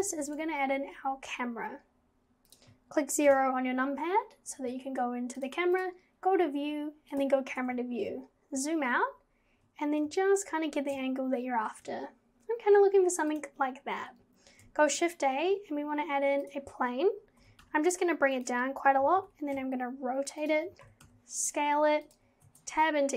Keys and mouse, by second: 0.2 shift+a, 3.3 KP_0, 5.4 click, 7.1 click, 13.3 click, 14.8 shift+a, 17.4 g, 19.0 g, 20.5 z, 20.6 z, 20.7 z, 20.8 g, 22.4 Tab.